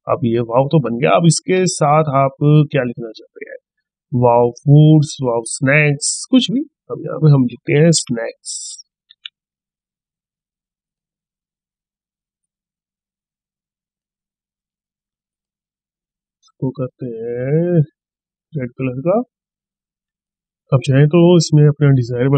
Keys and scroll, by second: 6.9 ctrl+a.